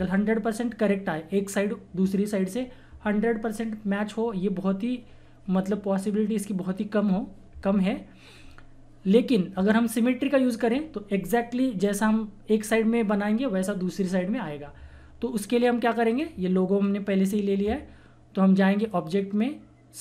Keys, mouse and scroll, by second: 8.4-9.2 scroll down 1, 10.1-12.0 scroll down 1, 16.0-18.7 drag.